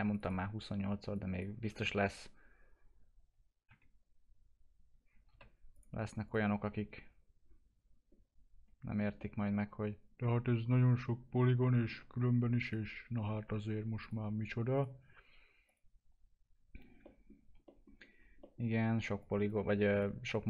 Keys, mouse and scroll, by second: 3.6 typing, 5.7 click, 6.5-8.0 scroll down 1, 9.2-12.2 alt+middle drag, 12.2-12.6 scroll up 1, 12.6 click, 14.0 ctrl+click, 17.0 middle click, 17.9-18.4 scroll down 1, 18.4 middle click, 18.6-19.2 scroll down 1, 19.2 click.